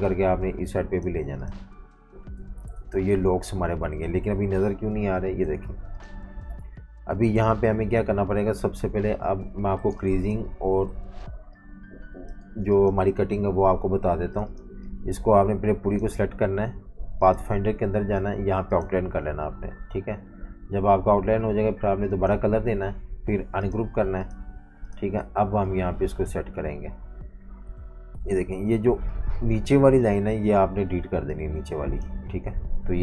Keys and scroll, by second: 2.7 super+y, 5.4 super+y, 6.9 super+y, 7.4 super+-, 8.5 super+-, 8.7 super+-, 9.9 space, 11.1 typing, 12.4 typing, 25.2 typing, 26.6 v, 27.6 super+y, 28.9 z, 29.0 z, 30.0 v, 30.1 v.